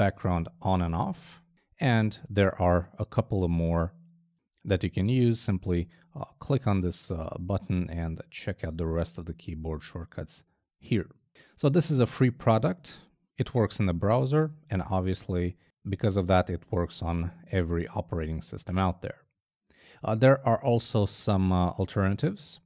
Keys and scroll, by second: 0.3 b.